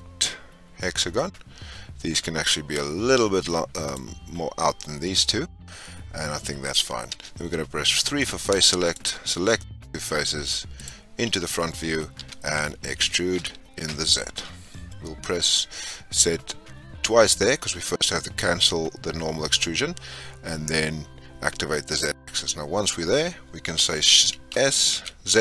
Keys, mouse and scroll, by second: 7.1 3, 8.1 click, 8.8 shift+click, 10.7 click, 12.1 e, 22.1-22.9 scroll down 6, 24.5 s.